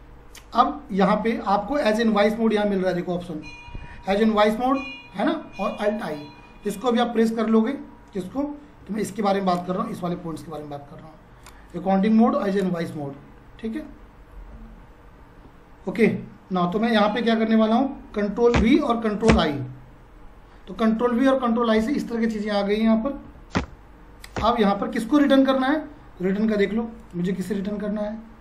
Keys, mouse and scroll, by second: 3.2 F4, 8.8 F5, 15.3 F5, 16.1 F4, 18.3 F4, 18.5 ctrl+v, 19.3 ctrl+i, 23.3 1, 23.5 Return, 27.0 click.